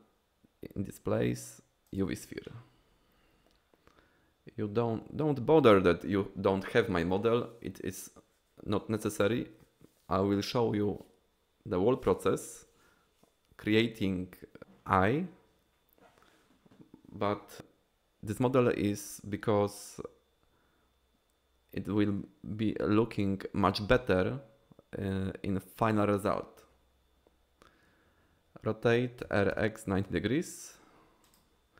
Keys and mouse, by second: 29.3 r, 29.6 x, 30.0 9, 30.1 0, 31.3 click.